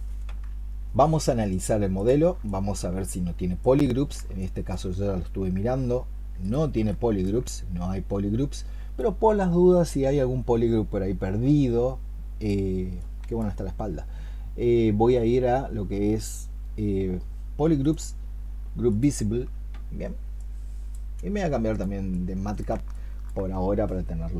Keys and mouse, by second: 2.3 alt+click, 4.1 alt+click, 4.2 alt+click, 6.6 alt+click, 7.2 alt+click, 22.0 double click, 22.8 alt+click.